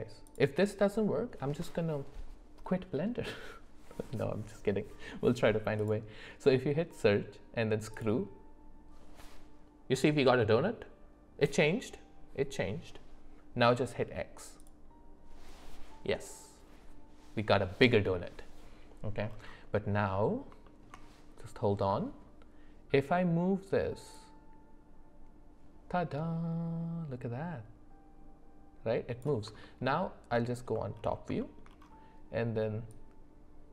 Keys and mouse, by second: 0.2-8.0 drag, 14.6 click, 19.8 middle click, 20.6 shift+middle click, 21.9 middle click, 24.2-29.3 drag, 31.4 shift+middle click, 33.0-33.7 drag.